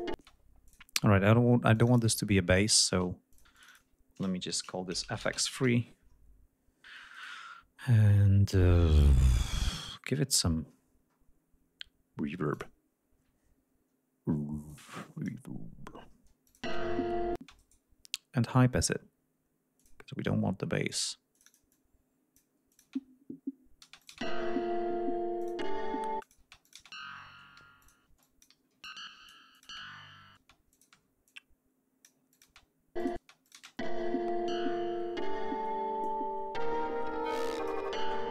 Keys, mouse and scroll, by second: 0.2 space, 0.7 click, 1.8 click, 3.3 click, 4.5 shift+f, 5.1 shift+x, 5.3 shift+space, 5.4 shift+3, 5.6 shift+Return, 7.2 right click, 10.7-11.3 scroll down 2, 12.6 click, 14.7 click, 16.5 click, 16.6 space, 17.4 space, 17.6 right click, 19.8 click, 21.4 click, 22.7 click, 22.9 space, 23.9 space, 24.0 click, 25.4 click, 26.2 click, 26.4 space, 26.7 click, 27.6-30.9 typing, 27.8 click, 28.2 click, 28.9 click, 29.6 click, 30.7 click, 31.3-32.3 drag, 32.3 click, 32.5 space, 33.0 click, 33.2 space, 33.5 click, 33.9 ctrl+scroll down 2, 35.4 ctrl+scroll down 2, 36.0-37.9 ctrl+drag.